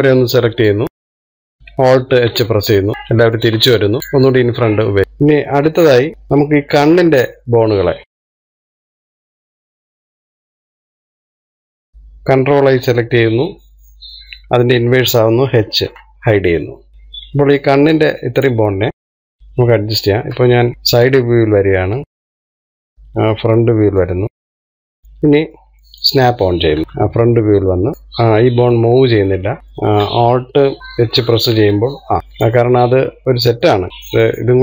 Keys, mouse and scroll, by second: 0.9 click, 1.9-3.1 middle drag, 3.1 alt+h, 4.0-5.7 shift+middle drag, 5.7-6.1 scroll up 2, 6.1-8.1 middle drag, 8.7 click, 9.0 shift+click, 9.2 shift+click, 9.4 shift+click, 9.7 middle click, 10.1 shift+click, 10.2 middle click, 10.6 shift+click, 10.9 shift+click, 11.1 shift+click, 11.3 shift+click, 11.5 shift+click, 11.7 shift+click, 11.9 middle click, 13.7 ctrl+i, 16.9-19.0 middle drag, 19.0 click, 20.6 KP_3, 20.9 shift+middle click, 21.6-22.2 scroll up 1, 22.2 click, 24.7 click, 25.1-27.0 middle drag, 27.0 click, 28.0 click, 29.3 middle click, 29.6-31.7 scroll up 1, 31.7 alt+h, 32.5-34.6 middle drag.